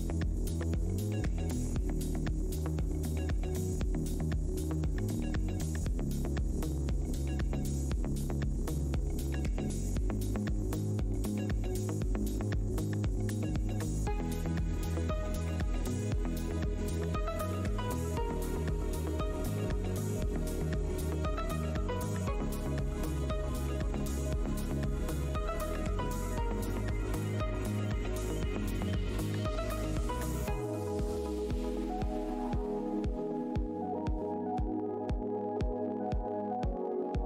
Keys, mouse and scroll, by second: 0.0 Tab, 0.0-0.6 scroll up 1, 0.6 Tab, 13.3 click, 13.3 Tab, 13.7 w, 14.4 click, 14.5 Tab, 15.7 Tab, 16.4 alt+scroll down 1, 16.8 e, 17.4 Tab, 17.6 click, 18.3 click, 18.4 alt+Tab, 19.0 click, 19.3 Tab, 20.1 shift+Tab, 20.7 alt+click, 20.8 alt+Tab, 20.9 alt+scroll up 1, 21.6 shift+Tab, 21.8-22.4 alt+scroll up 1, 22.4 Tab, 23.1 w, 23.7 click, 24.0 Tab, 24.9 click, 26.5 alt+Tab, 26.6 alt+click, 27.4 alt+click, 28.4 alt+Tab, 28.9 shift+Tab, 31.3 alt+click, 32.1 alt+click, 32.2 alt+scroll up 1, 33.1 alt+h, 33.1-33.7 scroll down 1, 33.7 click, 34.1 Tab, 34.5 Delete, 34.6 Tab, 35.1 Tab, 35.5 click, 35.6 Tab, 35.7 alt+click, 36.7 shift+Tab.